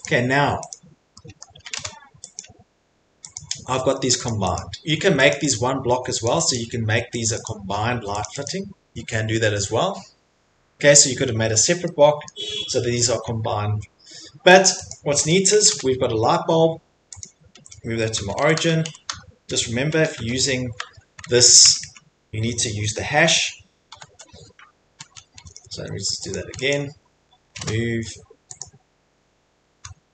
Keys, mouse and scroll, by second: 0.1 click, 0.7 click, 1.4 middle click, 1.6 m, 2.4 click, 3.3 click, 3.6 Escape, 3.8 middle click, 3.9 middle click, 4.2 click, 4.6 click, 4.8 Escape, 5.1 Escape, 5.3 click, 5.5 click, 5.9 Escape, 6.2 click, 6.5 click, 6.9 Escape, 7.3 click, 7.5 click, 7.9 Escape, 8.2 click, 8.9 click, 9.2 Escape, 12.3 middle click, 12.7 middle click, 13.3 middle click, 13.5 middle click, 14.6 click, 14.9 click, 15.6 m, 17.2 click, 17.9-20.1 typing, 20.8 Tab, 21.2 Tab, 21.6 Tab, 21.8 Tab, 23.9 shift+3, 25.3 Escape, 25.7 Escape, 26.2 #, 26.4 click, 26.7 click, 27.5 m, 28.6 click.